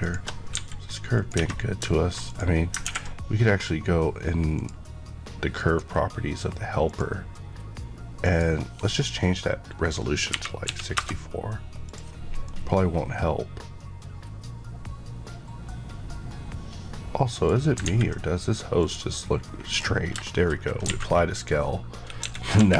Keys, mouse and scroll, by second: 0.5 g, 1.1 click, 1.3 Tab, 2.2 click, 4.5 click, 8.1 click, 10.2 KP_6, 10.6 KP_4, 10.9 Return, 11.8 click, 12.4 middle click, 17.6 scroll down 2, 17.8 ctrl+a, 18.7 click, 19.4 scroll down 1, 20.2 middle click, 20.4-21.3 scroll up 3, 21.3 click, 22.2 KP_1, 22.5 KP_3.